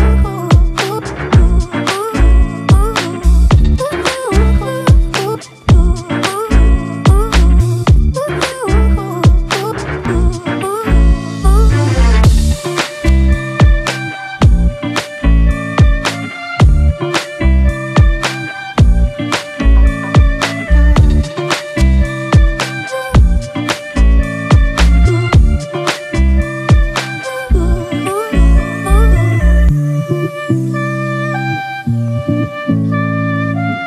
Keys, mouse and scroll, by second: 0.9 ctrl+e, 2.7 double click, 11.5 ctrl+t, 14.6 Right, 15.4 Right, 15.9 Right, 16.2 Left, 16.7 Right, 16.9 Right, 17.2 Right, 17.7 Left, 23.6 Delete, 31.1-31.9 typing.